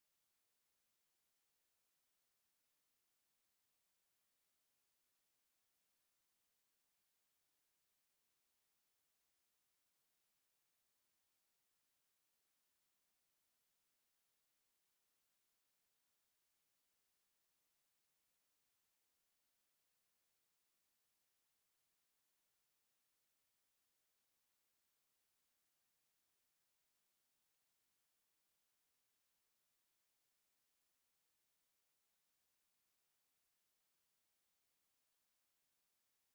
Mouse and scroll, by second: 5.3 click, 7.8 click, 9.9 click, 15.0 click, 17.4-18.5 drag, 20.2 click, 22.0 click, 23.6 click, 25.8 click, 30.2 click, 32.2 click.